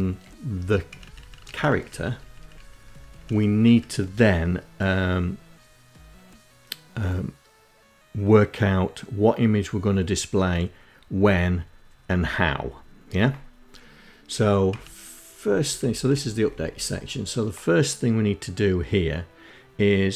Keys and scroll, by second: 0.1 Up, 0.2 Up, 0.4 Up, 1.1 Up, 1.7 Up, 1.9 Up, 2.1 Up, 2.7 Up, 13.3 Down, 13.7 Up, 14.4 Up, 14.5 Up, 14.8 Up, 14.9 Up, 15.1 Down, 15.4 Down, 15.6 Down, 15.8 Down.